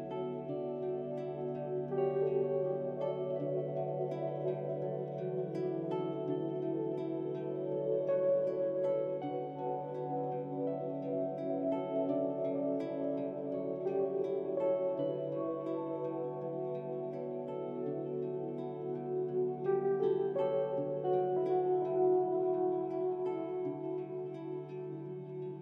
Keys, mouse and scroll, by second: 0.3 click, 0.7 alt+shift+click, 2.2 alt+shift+click, 4.6-5.5 drag, 6.3-7.3 drag, 7.7-10.5 drag, 11.7 click, 23.3 alt+shift+click, 24.5-25.6 alt+shift+drag.